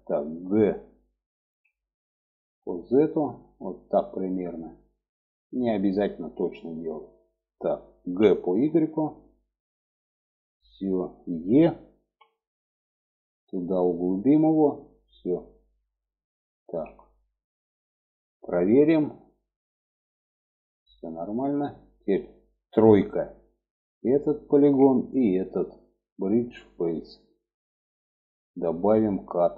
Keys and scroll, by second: 0.8 g, 7.4 g, 11.4 e, 16.0 alt+z, 22.2 3.